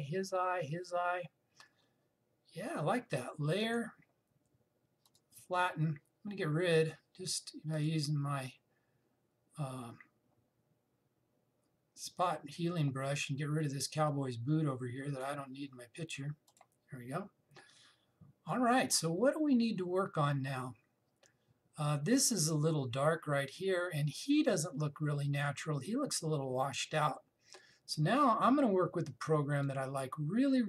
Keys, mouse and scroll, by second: 4.3 click, 8.4 click, 14.7-17.2 drag, 30.3-30.6 drag.